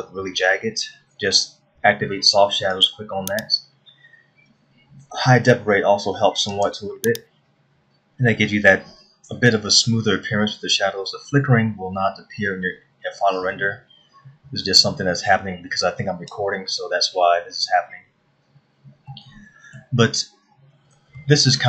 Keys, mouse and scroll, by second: 3.3 click, 7.1 click, 19.1 scroll down 1, 19.7 middle click, 20.7-21.3 scroll down 1.